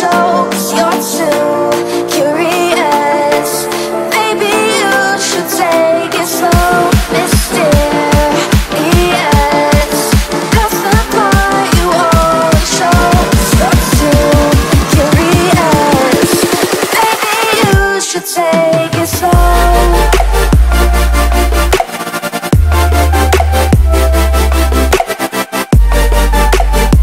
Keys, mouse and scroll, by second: 0.3 right click, 1.0 click, 1.6-4.1 typing, 4.5 click, 5.9 F10, 7.4 click, 7.8 right click, 8.2 scroll down 1, 8.5 right click, 9.8 click, 11.3 ctrl+c, 11.8 click, 13.6 right click, 14.0 click, 14.2 ctrl+v, 14.6 scroll down 1, 15.6 click, 16.5-17.3 scroll up 3, 17.4-20.0 drag, 20.0 right click, 20.2 click, 20.9 click, 23.3 F11, 23.3 F10, 23.7 right click, 24.4-25.0 scroll down 1, 25.5-27.0 drag.